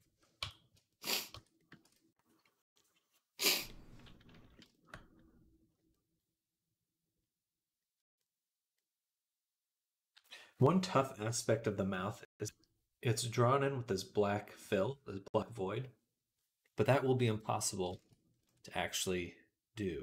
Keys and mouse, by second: 0.2 Tab, 1.7 ctrl+s, 3.6-5.8 middle drag, 9.0 middle click, 9.1 middle click, 9.5-19.3 middle drag, 19.5 middle click, 19.8 middle click.